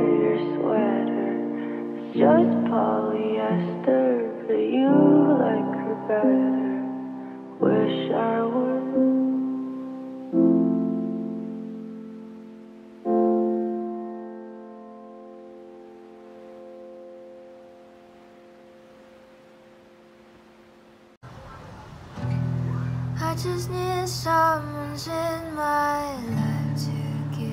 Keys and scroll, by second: 8.9 Delete, 10.6 t.